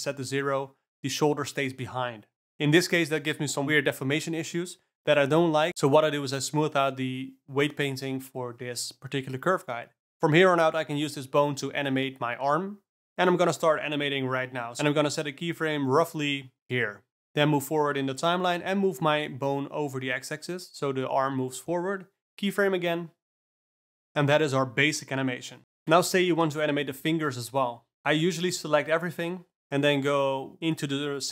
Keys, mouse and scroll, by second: 3.1 click, 3.5 Tab, 5.9 q, 7.5-9.5 middle drag, 9.7 Tab, 10.0 click, 10.6 g, 15.5 shift+Up, 15.6 click, 18.0 shift+Up, 18.3 shift+Up, 18.6 shift+Up, 19.4 g, 23.1 shift+Left, 23.3 d, 24.0 space, 26.4 ctrl+r, 27.2 click, 28.2 click, 30.7 ctrl+r.